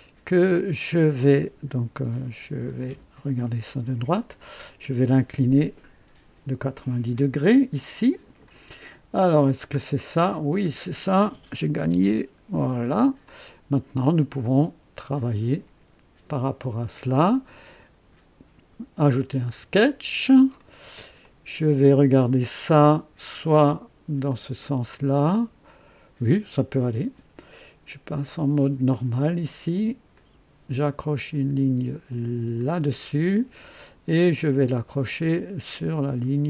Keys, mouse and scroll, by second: 2.4 KP_1, 2.8 KP_3, 3.7-4.2 right drag, 7.8-8.6 drag, 9.3 click, 9.8-10.3 scroll down 1, 10.5-10.9 scroll down 1, 11.6 KP_9, 11.8 KP_0, 12.0 KP_Enter, 12.0 KP_Enter, 13.1 typing, 13.2-14.0 drag, 15.0 click, 17.1 click, 19.0 click, 20.5 right click, 24.2 click, 28.9 click, 30.1 click, 32.5 click.